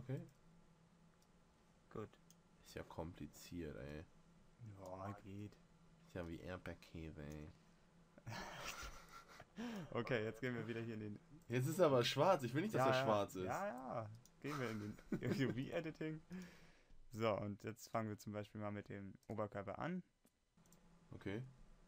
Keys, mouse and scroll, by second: 12.0-13.9 middle drag, 19.8-21.6 right drag.